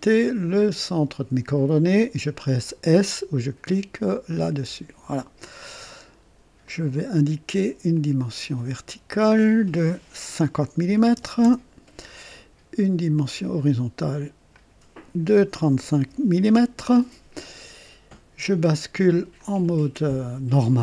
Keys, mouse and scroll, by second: 0.6 click, 4.5 s, 5.9 right click, 6.7 click, 8.0 click, 9.1 click, 11.0 KP_5, 11.1 KP_0, 11.4 KP_Enter, 13.1 click, 14.5 click, 15.7 KP_3, 16.0 KP_5, 16.4 Return, 19.4 click, 19.4 typing.